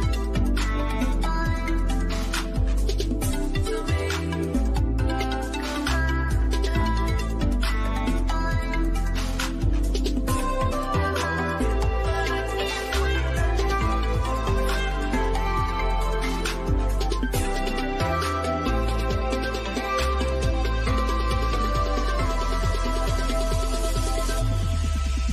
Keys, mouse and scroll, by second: 13.4 scroll up 1, 16.5-16.8 scroll up 1, 19.5 click, 20.6 scroll down 1, 22.1 middle click, 22.7 scroll down 1, 25.2 scroll up 1.